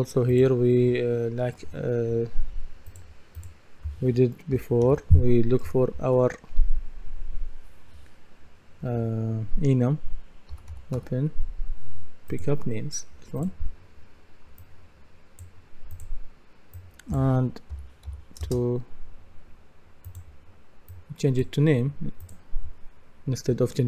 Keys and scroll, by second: 4.3-5.9 typing, 5.7 shift+Up, 10.3-11.5 typing, 17.8-18.6 typing.